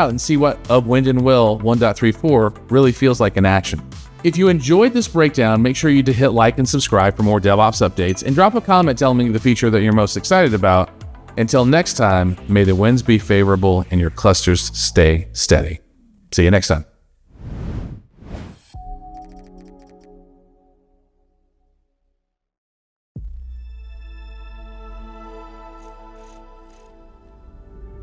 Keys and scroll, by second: 3.7 BackSpace.